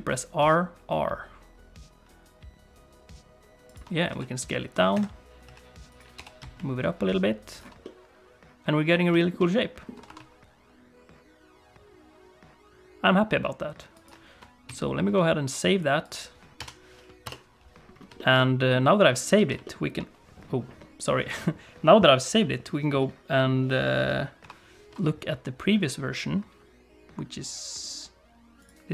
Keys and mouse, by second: 4.1 s, 5.4 s, 6.1 g, 7.8 middle click, 9.2 shift+middle click, 9.4 middle click, 9.9 r, 14.7 ctrl+s, 18.1 shift+middle click, 18.3 middle click, 19.3 alt+a, 19.6 shift+middle click, 23.0 middle click.